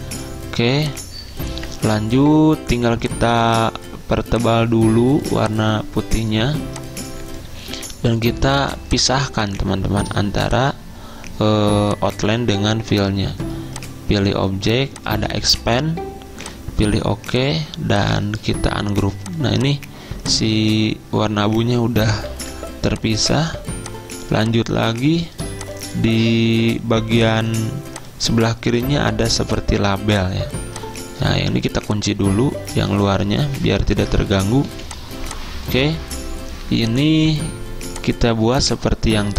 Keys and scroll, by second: 22.4 ctrl+z, 23.7 z, 24.4 z, 25.4 c, 30.1 z, 31.5 typing, 34.0 ctrl+2, 34.7 z.